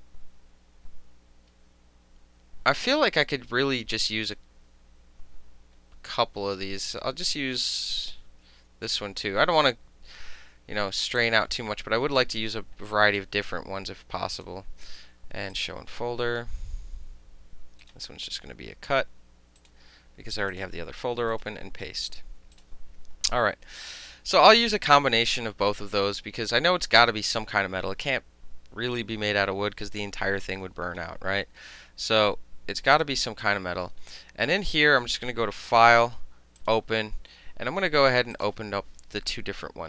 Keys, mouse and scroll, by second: 3.9 click, 5.3 click, 6.8 click, 11.2 click, 14.4 click, 15.6 click, 17.9 right click, 19.6 click, 20.6 click, 21.4 right click, 22.6 click, 25.8 click, 26.2 click, 33.0 click, 35.7 click, 36.6 click, 38.4 click.